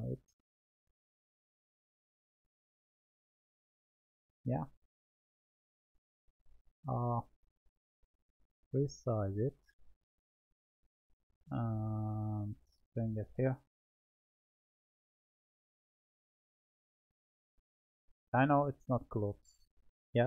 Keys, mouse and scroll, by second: 0.6-2.7 drag, 3.7-4.8 middle drag, 4.8-7.2 scroll down 4, 7.2-8.3 drag, 10.0-11.8 middle drag, 11.8-12.9 drag, 13.7-15.3 middle drag, 15.3-18.4 drag.